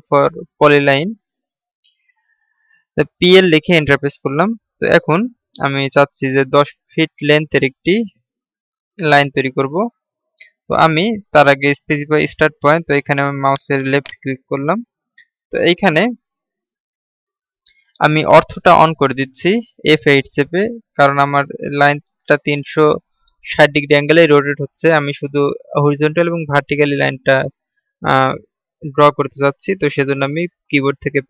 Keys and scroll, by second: 0.0-0.1 typing.